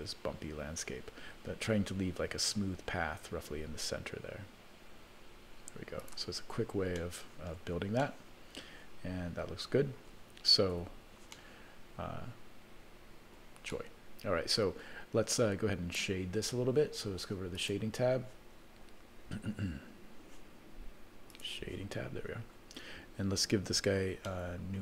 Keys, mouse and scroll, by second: 7.4 middle click, 8.2-10.2 middle drag, 10.8 Tab, 11.3-12.7 middle drag, 13.3 middle click, 13.7 middle click, 17.6 click, 21.4 click, 22.0-22.8 scroll down 7, 22.8-23.9 scroll up 1, 24.7 shift+middle click.